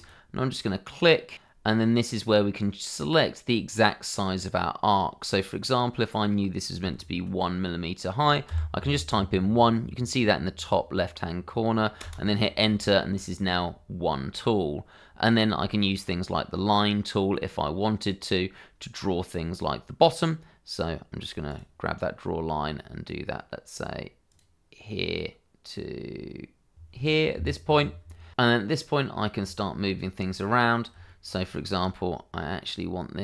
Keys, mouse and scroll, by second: 1.2 click, 8.5 1, 12.0 Return, 18.4-19.1 scroll down 1, 21.5 click, 24.3 click, 27.2 click, 27.9 Escape, 28.7 click, 29.5 shift+middle click, 31.0 shift+middle click.